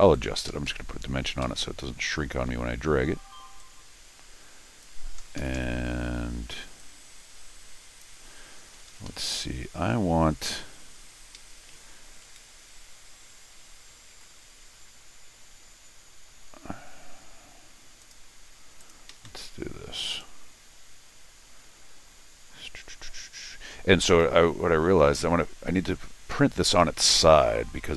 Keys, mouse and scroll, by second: 0.1 click, 0.5 Escape, 0.7 Escape, 1.4 Escape, 2.5 Escape, 3.6-4.8 drag, 5.2 Escape, 5.4 Escape, 5.5 Escape, 6.8-8.0 drag, 8.7 Escape, 8.9 Escape, 9.1 Escape, 11.1 middle click, 11.1 scroll down 1, 11.3 Escape, 14.1 ctrl+r, 18.0 click, 18.8 click, 19.1 Escape, 19.3 Escape, 20.1 right click, 24.0 Escape, 24.1 click, 26.8 Escape.